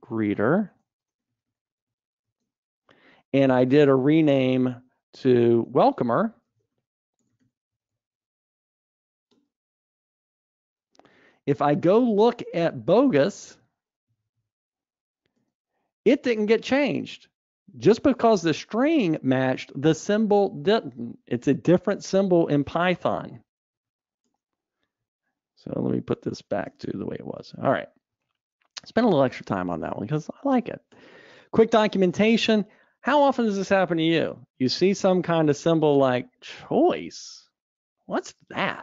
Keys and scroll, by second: 2.4 super+e, 5.1 ctrl+alt+t, 15.5 super+e, 24.1 super+e, 26.0 super+z, 28.3 alt+Up, 29.2 alt+Up.